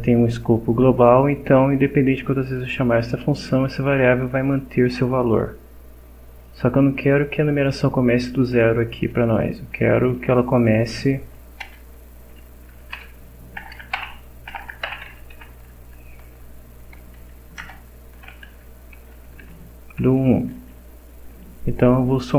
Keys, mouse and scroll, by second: 3.3 click, 4.3 click, 4.9 click, 6.4 click, 7.7 click, 8.2 click, 10.7 Down, 11.2 End, 11.6 Return, 12.5-15.8 typing, 17.3 shift+Down, 17.6 shift+Return, 18.2 space, 18.5 shift+=, 19.0 space, 19.4 shift+1, 20.7 BackSpace.